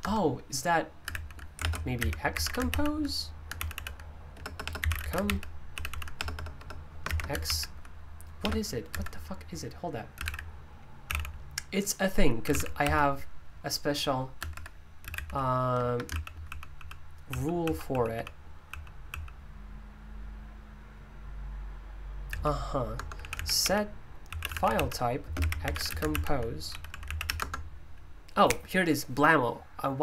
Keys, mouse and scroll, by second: 0.0 Return, 1.6 ctrl+w, 1.7-2.9 typing, 3.5 Tab, 3.7 Tab, 4.3 Up, 4.5-5.4 typing, 5.7 Tab, 5.8 Tab, 7.0 typing, 7.4 Tab, 8.9 Escape, 9.9-11.0 typing, 12.2-19.0 typing, 22.3-27.7 typing.